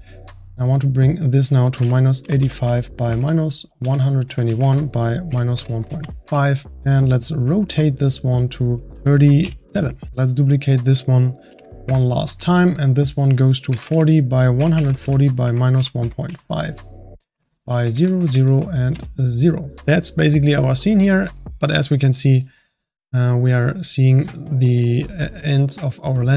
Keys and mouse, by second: 0.6-4.3 drag, 8.7-10.1 drag, 10.1 ctrl+z, 10.4 click, 11.5 shift+d, 12.6-16.0 drag, 19.8 click.